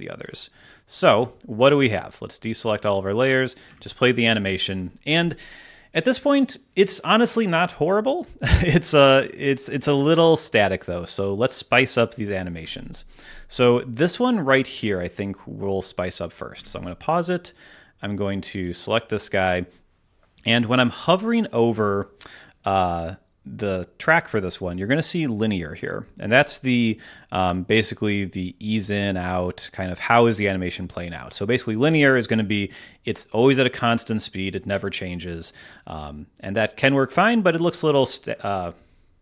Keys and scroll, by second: 3.6 space, 4.3 space, 16.5 space, 17.2 space.